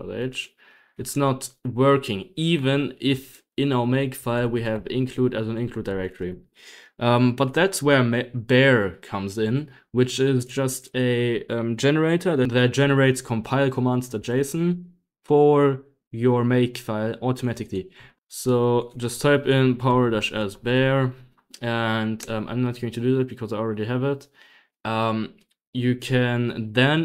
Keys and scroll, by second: 0.0-0.4 typing, 0.4 Escape, 1.0 Escape, 2.8-7.3 typing, 9.4-10.9 typing, 14.1 p, 17.4-23.4 typing, 26.3 b.